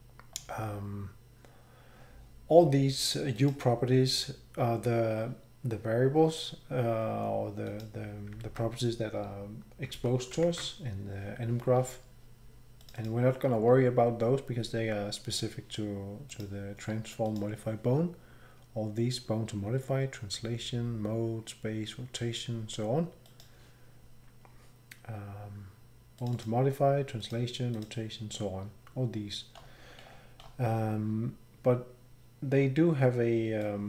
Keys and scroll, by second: 8.4 alt+Tab, 9.9 alt+Tab, 10.4 alt+shift+Tab.